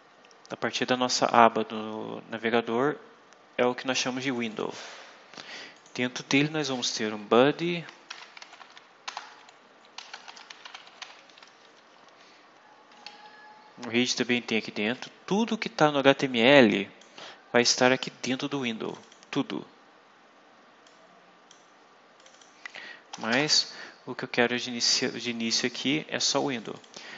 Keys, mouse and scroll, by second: 4.3 click, 5.6 click, 8.0-11.4 typing, 13.9 Left, 16.4 click, 18.8 click, 20.8 click, 22.1 click, 23.0 BackSpace, 26.5 click.